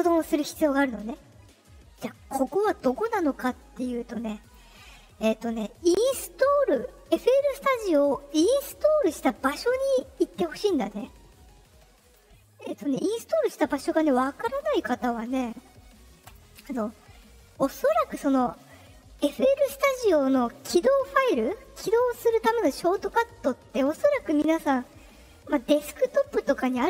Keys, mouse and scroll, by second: 4.4 click, 5.9 click, 11.9 click, 13.1 click, 14.8 click, 16.2 click, 17.6 click.